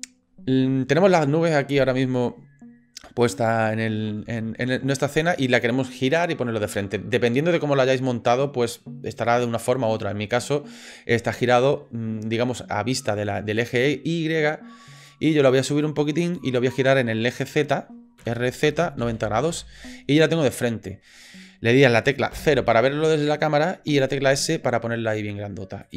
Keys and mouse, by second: 4.9-5.3 shift+drag, 15.0 click, 15.8 click, 18.2 r, 20.4-21.3 middle drag, 22.3 KP_0, 24.2 s.